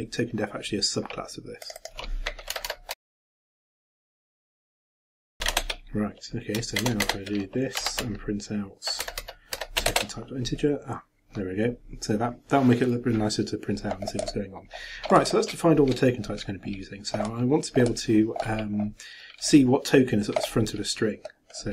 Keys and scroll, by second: 2.9-5.9 typing, 6.8 shift+Return, 9.9 shift+Return.